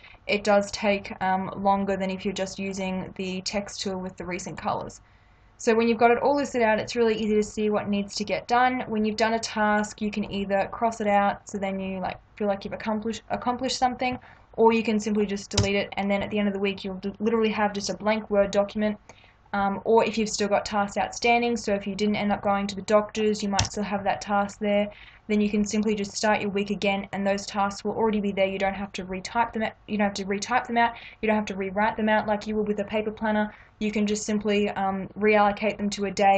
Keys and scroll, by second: 15.5 BackSpace, 23.5 BackSpace.